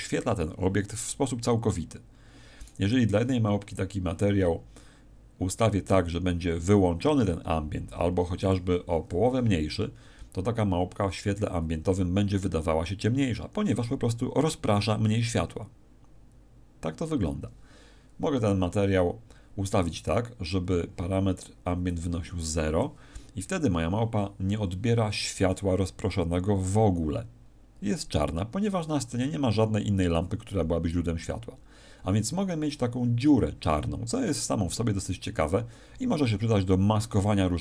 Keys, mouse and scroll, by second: 2.6 right click, 3.6 click, 5.8 click, 20.6 Escape, 20.6-21.7 scroll down 2, 21.8 click.